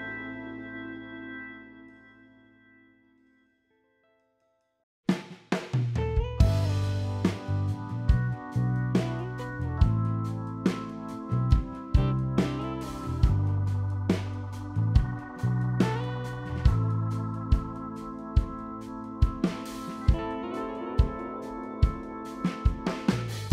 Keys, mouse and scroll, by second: 1.7 ctrl+r, 3.2 click, 3.8 click, 6.0 click, 7.7 ctrl+r, 9.9 click, 11.1 ctrl+click, 11.6 middle click, 12.4 ctrl+r, 13.8 click, 14.3 click, 14.6 middle click, 15.8 ctrl+click, 16.6-17.2 scroll down 2, 17.2 middle click, 17.2 scroll up 1, 17.3 ctrl+r, 18.2 g, 18.9 ctrl+click, 20.0 middle click, 20.5 shift+middle click, 20.6-21.3 scroll up 3, 21.5 ctrl+z.